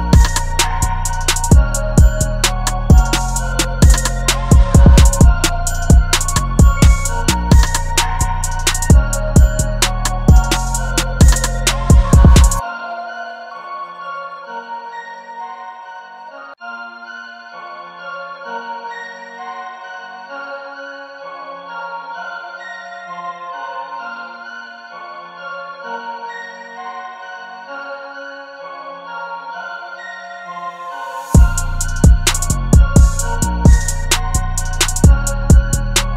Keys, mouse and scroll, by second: 2.6 ctrl+t, 3.5 alt+shift+click, 10.7 Down.